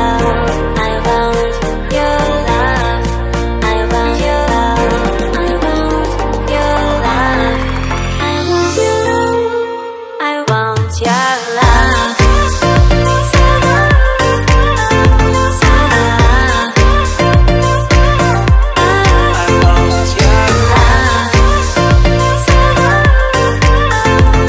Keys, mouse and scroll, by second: 0.4 click, 4.0 click, 5.7 click, 6.5 click, 6.9 click, 7.0 double click, 8.3 double click, 10.6 click, 12.0 click, 14.3 click, 15.7 click, 16.7 click, 17.5 click, 19.4 click, 20.3 click, 20.9 click, 21.6 click, 22.9 click, 23.9 click.